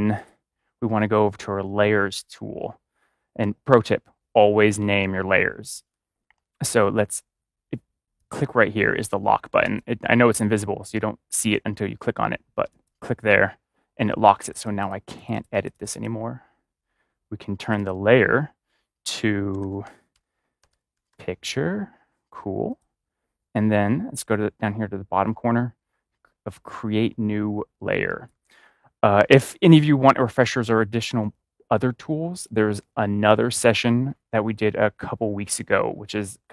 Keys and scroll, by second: 19.5-21.0 typing.